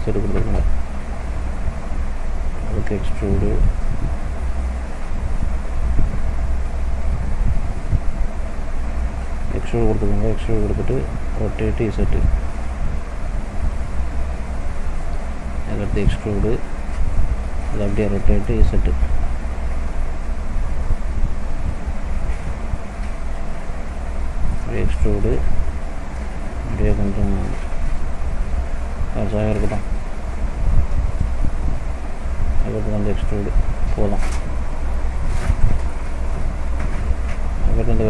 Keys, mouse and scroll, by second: 2.7 e, 4.9 ctrl+z, 5.4 ctrl+z, 8.6 ctrl+z, 9.4 e, 11.4 r, 15.2 e, 18.0 r, 20.7 click, 23.2 e, 24.5 middle click, 26.5 s, 29.4 middle click, 30.0-30.6 scroll up 2, 30.6-31.2 scroll down 1, 31.2 middle click, 31.2-31.6 scroll down 2, 32.4 e, 33.9 middle click, 34.2-34.7 scroll down 2, 34.6 middle click, 35.1 scroll up 2, 35.7 middle click, 36.9 click.